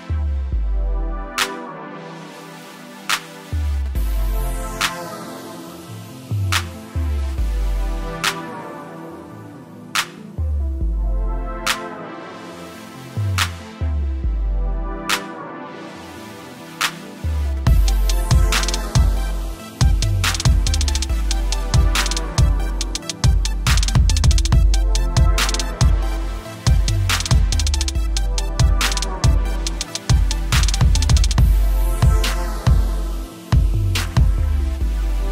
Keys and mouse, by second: 1.0 click, 2.3 right click, 3.5 click, 4.3 Return, 5.1-5.9 typing, 5.1 click, 6.7 alt+click, 7.1 alt+shift+click, 7.9 alt+shift+click, 9.0 click, 9.6 Return, 10.0 =, 11.4 t, 13.2 click, 16.1 click, 16.6 Return, 17.2 ctrl+alt+Num_Lock, 17.9 ctrl+alt+click, 20.3 t, 21.0 click, 23.6 Return, 26.5 click, 27.8 ctrl+click, 28.9 t, 29.9 t, 30.7 click, 34.5 alt+shift+Return.